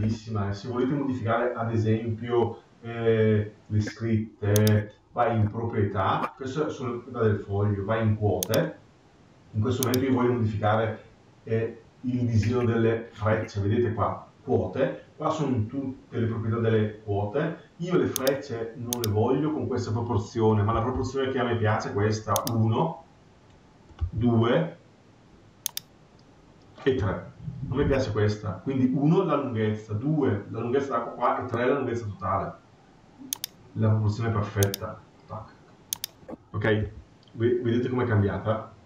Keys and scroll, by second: 36.7 ctrl+q.